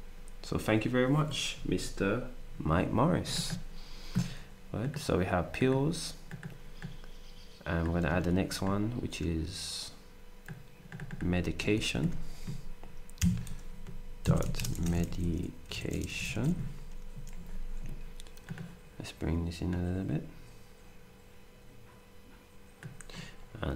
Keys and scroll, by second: 8.4 ctrl+d, 11.7 ctrl+a, 13.2 2, 14.2-16.9 typing.